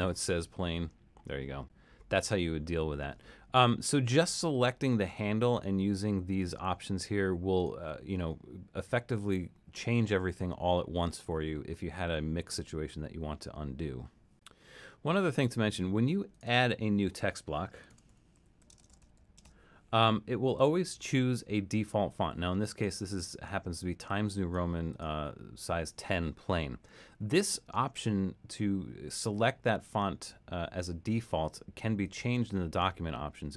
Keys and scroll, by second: 17.7-19.9 typing.